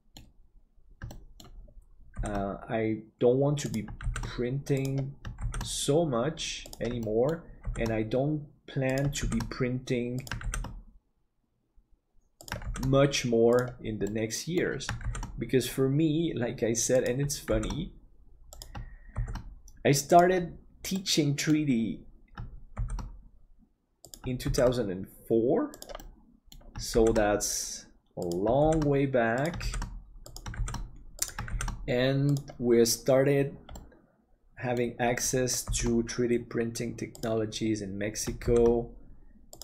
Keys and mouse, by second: 1.1 shift+middle click, 2.2 shift+d, 5.6 shift+d, 7.1 shift+middle click, 14.2 middle click, 21.0 middle click, 22.7 shift+d, 26.0 middle click, 27.1 shift+d, 33.8-34.9 middle drag, 35.7 shift+d.